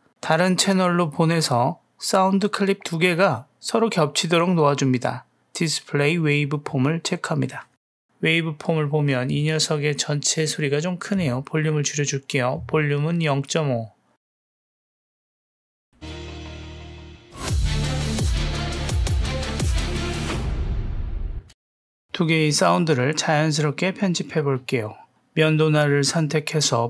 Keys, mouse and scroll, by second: 2.7 g, 8.6 ctrl+middle click, 9.7-10.7 middle drag, 13.1-14.6 drag, 15.7 click, 15.9 space, 21.3 space, 21.9 middle click, 23.6 space, 24.2 drag, 24.2 space.